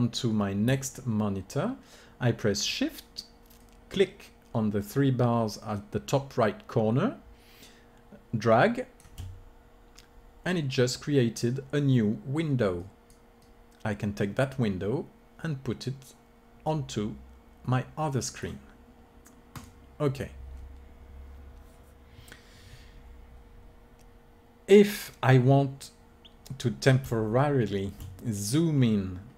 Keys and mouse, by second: 3.5-5.3 drag, 13.5-14.5 drag, 17.3 middle click, 25.2-29.3 middle drag.